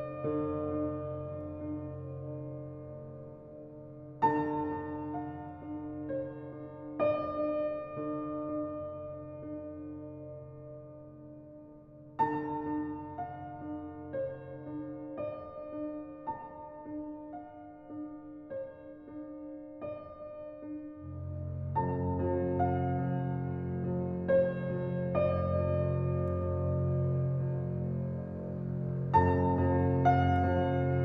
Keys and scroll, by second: 17.1-19.1 typing.